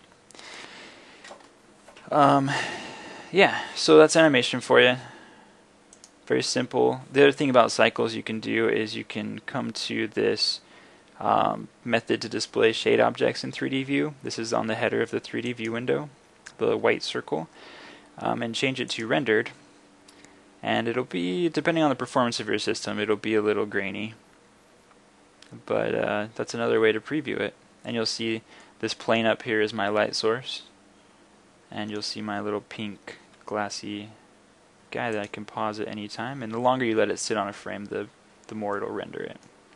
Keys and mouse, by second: 0.0 Escape, 5.1-6.0 middle drag, 15.5 click, 28.9 middle click, 35.4-39.1 drag.